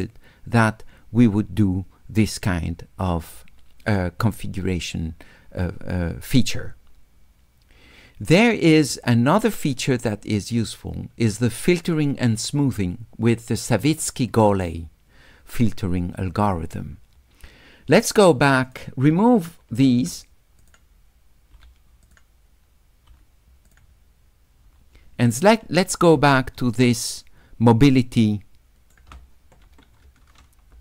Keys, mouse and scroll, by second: 11.8 click, 18.7 click, 20.7 click, 22.1 click, 23.7 click, 26.4 shift+click, 26.5 shift+middle click, 26.5-28.9 shift+drag.